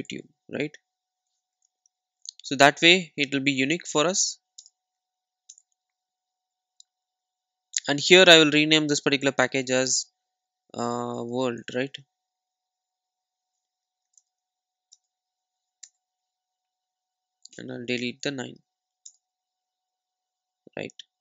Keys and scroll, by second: 1.7 alt+Return, 14.2 alt+Return, 18.2 Delete.